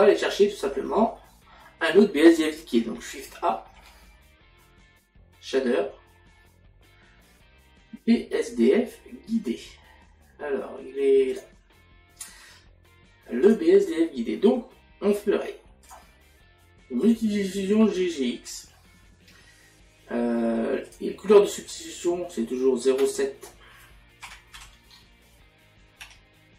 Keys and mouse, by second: 0.0 middle click, 1.2 middle click, 11.3 click, 13.5 click, 15.9 click, 17.0 click, 20.9 click, 23.1 click.